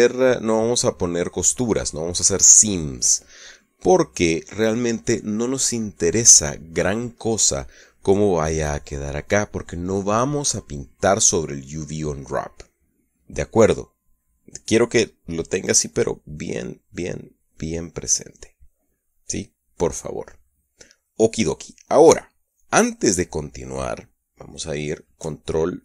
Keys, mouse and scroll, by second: 8.7-11.8 middle drag.